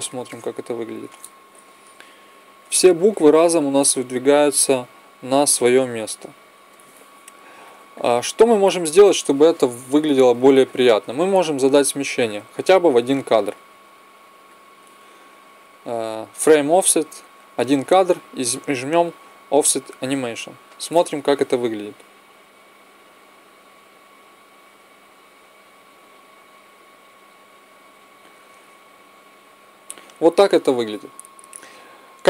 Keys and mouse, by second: 1.5 Left, 2.4 Right, 5.0 Left, 5.2 Right, 13.3-15.3 drag, 19.9-21.8 drag, 22.0 Right, 22.6 Right, 23.1 Right, 23.8 Right, 24.5 Right, 25.0 Right, 25.9 Right.